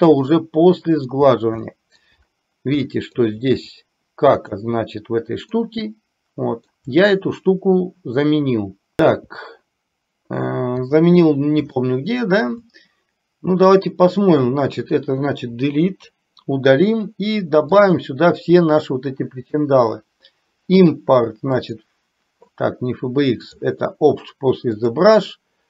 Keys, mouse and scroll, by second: 0.4 middle click, 1.7 shift+middle click, 3.0 shift+middle click, 5.7-6.9 middle drag, 9.0 shift+middle click, 11.9 shift+middle click, 21.9 click.